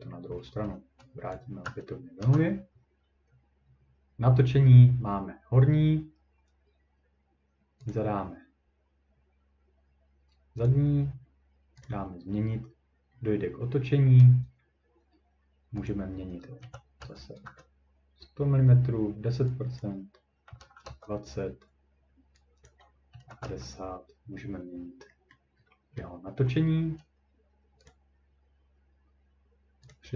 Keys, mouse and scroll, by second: 1.3 click, 1.7 typing, 2.2 Return, 7.9 click, 10.7 click, 11.8 click, 12.8-13.4 scroll, 15.9 click, 16.6-17.4 typing, 19.8 click, 20.2-21.0 typing, 22.7 click, 22.9-23.8 typing, 24.7 scroll down 1, 25.3-25.6 scroll down 2, 25.6 scroll up 3, 26.6 middle click, 27.9 click, 29.9 click.